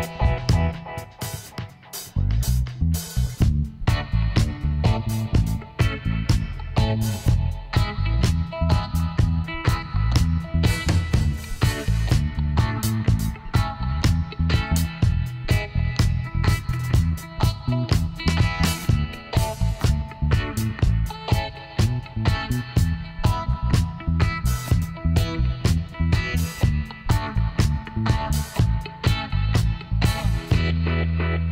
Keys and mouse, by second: 2.0-3.8 drag, 4.1-5.9 drag, 6.2 e, 8.1-10.0 drag, 8.9 g, 11.2 g, 11.4 ctrl+z, 12.0 ctrl+z, 15.8 middle click.